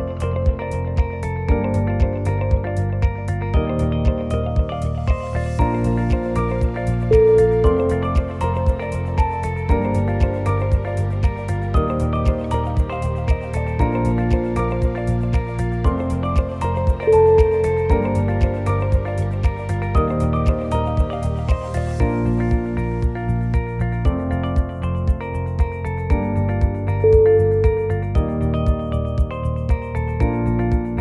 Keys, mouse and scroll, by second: 0.5 shift+middle click, 1.1-1.7 scroll up 1, 2.2 alt+click, 3.2 c, 5.0-5.4 scroll down 3, 5.4 middle click, 6.2 click, 6.9 middle click, 6.9-7.4 scroll up 1, 7.4 KP_3, 7.9 ctrl+KP_3, 9.1 click, 9.5 click, 10.7 ctrl+KP_3, 10.7 g, 13.5 middle click, 15.6 middle click, 15.6-16.2 scroll down 2, 15.6 KP_1, 17.6 click, 18.2 click, 19.8 middle click, 21.0 click, 22.4 click, 22.9 middle click, 23.8 click, 24.9 middle click, 24.9 1, 25.4-25.9 scroll up 2, 25.9 shift+middle click, 26.4 middle click, 29.2 click, 29.5 o, 29.7 g.